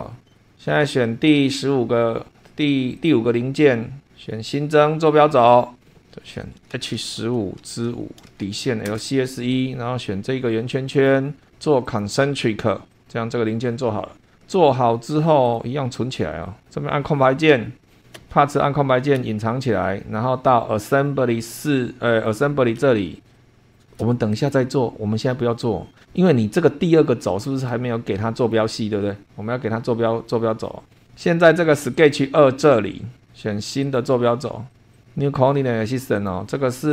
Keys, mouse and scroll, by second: 0.0 super+2, 0.4 click, 0.8-1.4 scroll down 3, 1.4 scroll up 2, 1.7-2.3 scroll down 2, 3.0 click, 4.4 click, 5.1 click, 6.0 Home, 6.7-8.2 typing, 8.9 Return, 10.9 click, 11.9 click, 12.9 click, 13.1 scroll down 2, 15.4 click, 16.6-17.6 scroll up 5, 17.9 click, 18.2 space, 19.1 space, 19.8-20.4 scroll down 4, 20.9-21.2 scroll down 2, 21.4 scroll down 2, 22.3 click, 22.8 space, 23.2 scroll down 2, 23.4 click, 24.3 shift+click, 27.0 scroll down 2, 28.1 shift+click, 30.2-31.2 scroll down 6, 32.0 click, 33.8 click, 34.7 click, 34.9 click, 36.2 click.